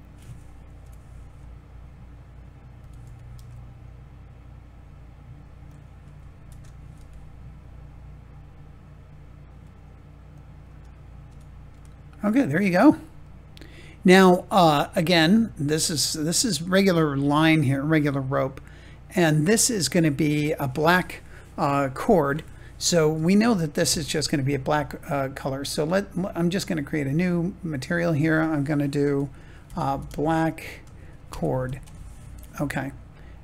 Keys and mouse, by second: 0.7 KP_7, 2.7 g, 3.0 y, 5.6 click, 6.4 shift+d, 6.9 y, 10.2 click, 10.6 Tab, 11.7 middle click, 13.1-14.1 middle drag, 23.1 click, 27.0-33.4 drag.